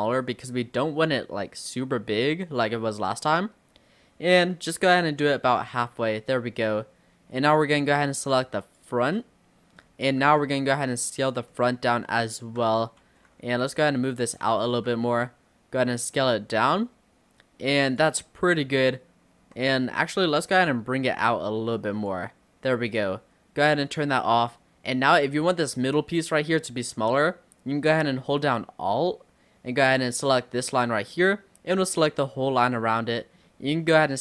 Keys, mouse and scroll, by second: 5.8 scroll up 1, 5.9-7.6 middle drag, 7.6 click, 8.7 shift+click, 9.2 middle click, 9.8-10.3 scroll down 3, 10.3 s, 11.5-12.3 scroll up 3, 11.6 middle click, 12.3 shift+middle click, 13.1 ctrl+z, 13.8 click, 14.7 s, 18.2 middle click, 18.6-19.5 scroll down 2, 19.5 s, 20.7 click, 22.9 click, 24.2-26.1 middle drag, 26.1 scroll up 3, 30.1 alt+click, 31.1-34.1 middle drag, 34.1 s.